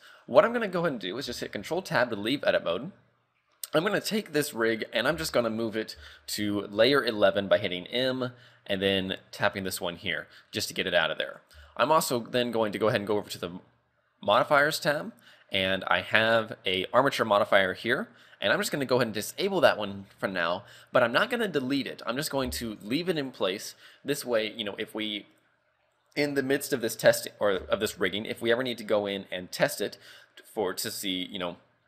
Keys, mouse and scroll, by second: 1.6 ctrl+Tab, 3.0 scroll down 2, 5.1 m, 10.6 scroll up 3, 10.8-11.3 scroll down 1, 11.3 right click, 11.6 z, 13.1 click, 16.2 click, 19.3 click, 22.7 click, 27.9 shift+middle click.